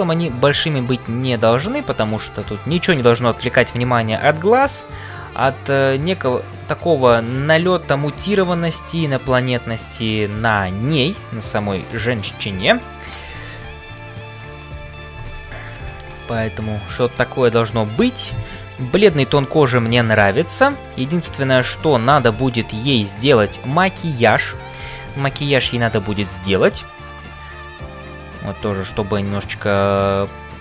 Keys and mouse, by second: 14.0 shift+middle click, 15.6 ctrl+s, 19.0 middle click, 20.7 shift+middle click, 21.2 middle click.